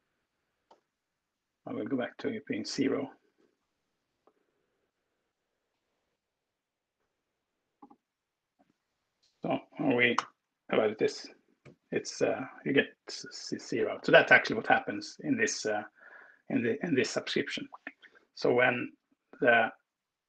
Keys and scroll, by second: 0.7 super+s, 3.5 ctrl+Return, 9.8 alt+Return, 13.5 Escape.